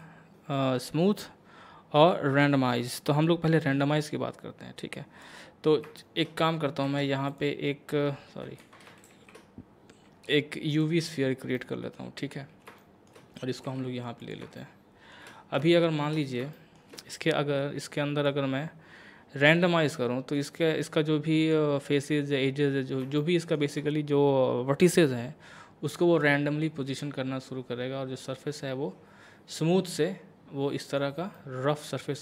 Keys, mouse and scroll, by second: 0.0-5.6 drag, 5.6 scroll down 1, 6.0 shift+middle click, 6.9 shift+a, 7.3 click, 8.6 ctrl+z, 9.1 shift+a, 10.7 click, 11.6 middle click, 13.7 g, 14.2 click, 14.6 shift+middle click, 15.3 shift+scroll up 1, 15.7 shift+middle click, 16.2 shift+scroll down 1, 16.5 shift+middle click, 18.3-19.9 drag, 19.9-21.4 middle drag, 21.4 click, 23.2 shift+middle click, 26.2-31.4 drag, 31.4-32.2 middle drag.